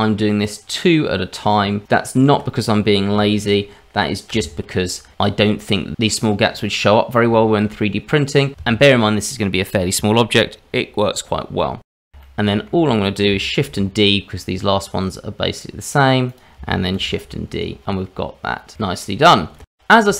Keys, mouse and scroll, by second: 3.4 ctrl+right click, 6.8 ctrl+right click, 7.7 ctrl+right click, 8.2 click, 9.0 shift+click, 10.1 shift+click, 10.5 shift+click, 11.4 f, 12.2 shift+middle click, 13.8 shift+d, 16.9 shift+d, 19.2 scroll down 2, 19.4 shift+middle click.